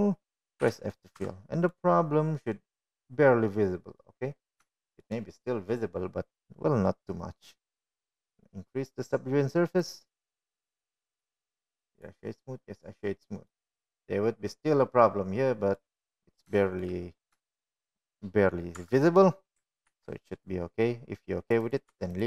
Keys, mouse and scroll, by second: 3.7 f, 4.0 click, 4.2 Tab, 4.7-7.0 middle drag, 7.7-8.1 shift+middle drag, 11.9 click, 12.9 click, 13.6-14.0 middle drag, 14.6 right click, 15.9-16.5 middle drag, 16.8 middle drag, 18.9-19.4 middle drag, 19.6 shift+middle drag, 20.5-20.8 shift+middle drag, 22.0 Tab.